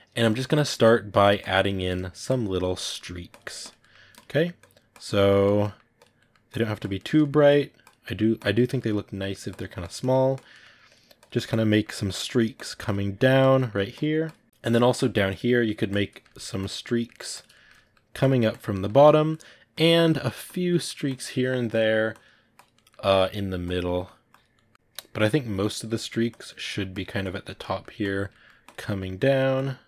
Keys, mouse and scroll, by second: 0.0 ctrl+middle click, 0.4 click, 1.0 middle click, 1.3 click, 1.6 middle click, 2.1 click, 2.6 ctrl+middle click, 3.2 click, 3.7 middle click, 4.0 click, 4.2 middle click, 4.4 click, 4.9 middle click, 5.3 click, 5.5 middle click, 5.8 click, 6.0 middle click, 6.3 click, 6.8 ctrl+middle click, 7.3 click, 7.9 middle click, 8.2 click, 8.6 ctrl+middle click, 9.3 click, 9.9 middle click, 10.2 click, 10.4 middle click, 10.7 click, 11.5 middle click, 11.9 click, 12.1 middle click, 12.4-13.4 drag, 13.4 middle click, 13.8 click, 14.4 shift+middle click, 15.1 click, 15.4 middle click, 15.7 click, 16.0 ctrl+middle click, 16.4 click, 16.7 middle click, 17.2 click, 17.4 shift+middle click, 18.1 click, 18.6 ctrl+middle click, 19.2 click, 19.8 ctrl+middle click, 20.3 click, 20.6 middle click, 20.9 click, 21.6 middle click, 22.0 click, 22.6 middle click, 23.0 click, 23.7 middle click, 24.2 click, 24.4 ctrl+middle click, 25.3 click, 25.6 ctrl+shift+middle click, 26.2 click, 26.3 ctrl+middle click, 26.8 click, 27.3 ctrl+middle click, 27.9 click, 28.2 ctrl+middle click, 28.5 click, 28.7 middle click, 29.0-29.8 drag.